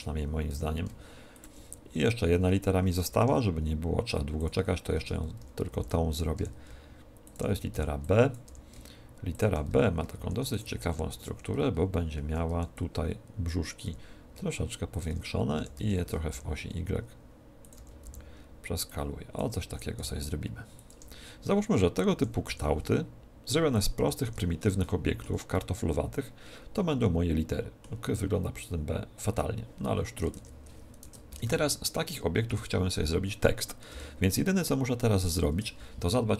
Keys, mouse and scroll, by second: 0.4 g, 1.4-3.2 drag, 3.0 shift+a, 5.0 Tab, 5.4 a, 5.6 b, 6.3 e, 7.3-9.2 drag, 7.4 a, 8.5 e, 9.4-11.1 drag, 9.6 a, 10.2 ctrl+r, 11.6 ctrl+r, 12.0 a, 12.4 b, 14.0 e, 15.0-16.7 drag, 15.6 s, 17.6-19.5 drag, 17.7 a, 18.0 b, 19.7 e, 20.8-22.6 drag, 22.1 s, 23.8-24.8 drag, 23.8 a, 24.3 Tab, 24.8 middle click, 25.2 z, 25.4 middle click, 30.3 Tab, 31.0 Tab, 31.2 KP_1, 31.4 z, 32.4 KP_7, 33.8 g, 35.2-36.3 drag.